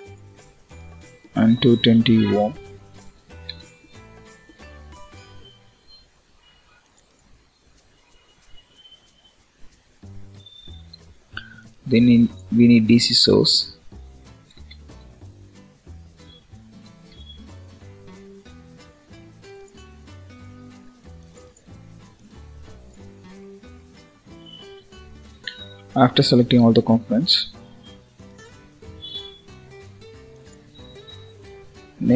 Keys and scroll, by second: 24.7 Delete.